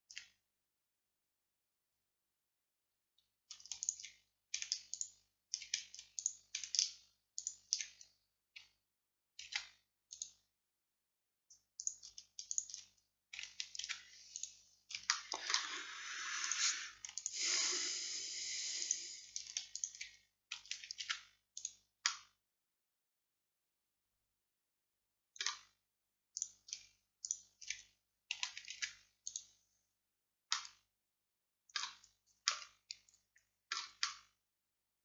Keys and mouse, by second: 3.9-9.2 drag, 9.5 alt+m, 13.0 right click, 13.9 alt+m, 15.3-16.5 middle drag, 16.9-24.2 drag, 21.1 alt+m, 26.4-35.0 drag, 28.8 alt+m.